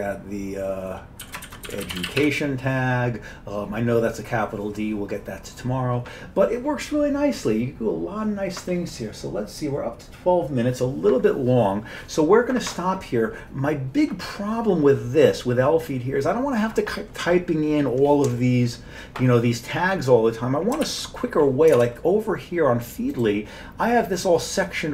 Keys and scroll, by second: 1.0-2.7 typing, 20.9 ctrl+g, 21.8 alt+Tab.